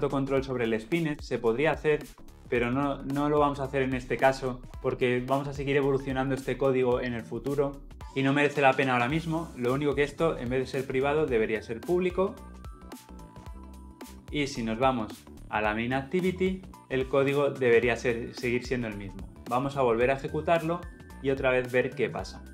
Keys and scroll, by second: 0.4 ctrl+x, 3.3 ctrl+v, 13.6 ctrl+alt+l, 13.8 ctrl+alt+o, 19.7 shift+F10.